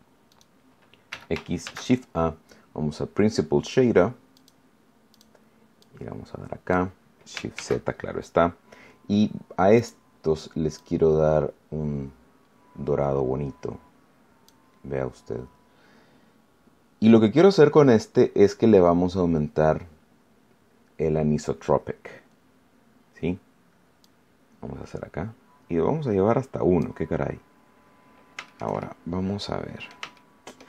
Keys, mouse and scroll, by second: 0.2 right click, 1.0 x, 1.6 shift+a, 4.3 click, 5.0 click, 5.8-6.8 drag, 7.5 shift+z, 9.7 click, 10.7-14.6 drag, 24.0-27.0 drag, 27.3-27.6 scroll up 1, 28.0 scroll down 1, 28.4 shift+middle click, 29.1 middle click, 30.1 shift+middle click.